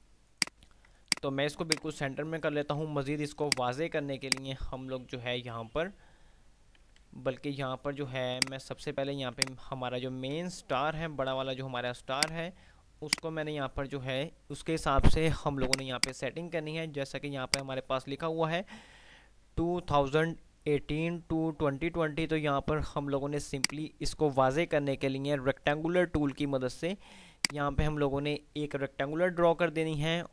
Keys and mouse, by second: 1.2 click, 1.5 shift+click, 2.0 c, 3.7 F2, 3.7 click, 7.2 F3, 8.2 click, 8.5 F3, 9.7 click, 11.0 space, 12.4 click, 12.9 F2, 13.2 click, 13.5 F2, 15.9 click, 23.7 click, 27.5-30.3 drag.